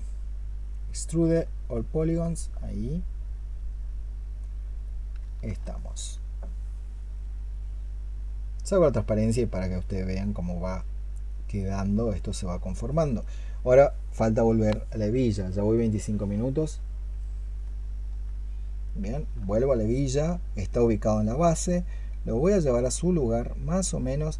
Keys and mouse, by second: 5.5 alt+click, 9.1 double click, 12.2 double click, 17.7 alt+click, 19.4 alt+click.